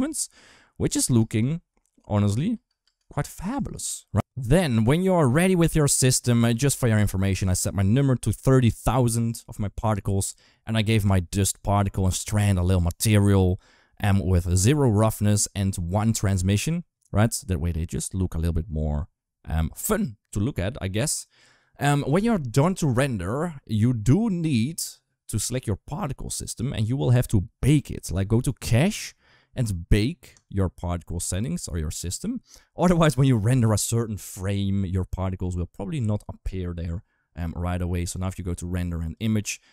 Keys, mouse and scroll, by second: 0.9 space, 2.1 ctrl+s, 2.3 space, 2.6 space, 3.8 ctrl+s, 11.9 click, 24.0 click, 26.1 click, 28.1 click, 30.2-37.3 drag, 38.7 click.